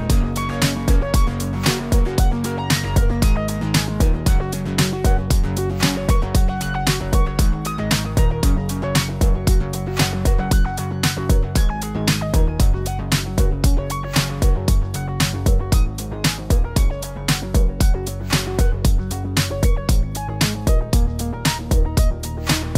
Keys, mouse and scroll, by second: 0.0 click, 0.1 click, 0.4 click, 0.8 click, 1.0-2.1 click, 1.3 click, 2.4 click, 2.7 click, 3.1 click, 4.0 click, 4.3 Tab, 4.4 click, 4.9 click, 5.1 shift+middle click, 5.2 middle click, 5.3 middle click, 5.4 shift+middle click, 5.5-5.9 scroll down 5, 6.0 click, 6.3 Tab, 6.4 click, 6.7 scroll up 2, 7.1 click, 7.5 click, 7.9 click, 7.9 ctrl+s, 8.0 middle click, 8.8 click, 10.0-10.3 click, 10.1 click, 10.1 click, 10.6 click, 10.8 click, 11.2 click, 11.3 o, 14.6 click, 15.6 click, 16.6 click, 17.7 click, 17.8 click, 18.9 click, 20.1 click, 20.2 click, 20.9 scroll down 5, 21.1-21.4 scroll up 2, 21.4 click, 22.0 click, 22.6 click.